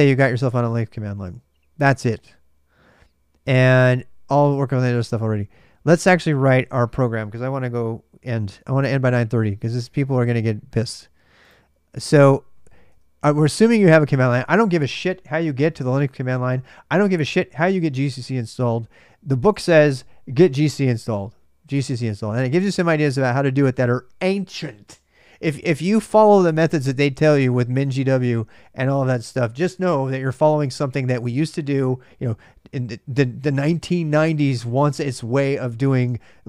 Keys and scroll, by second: 0.0-0.9 typing, 6.4 super+Tab, 11.5 super+Tab.